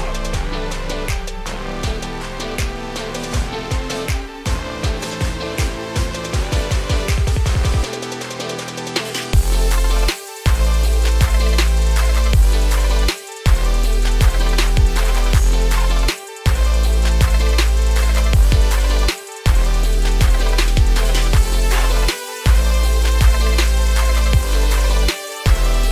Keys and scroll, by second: 7.6 ctrl+space.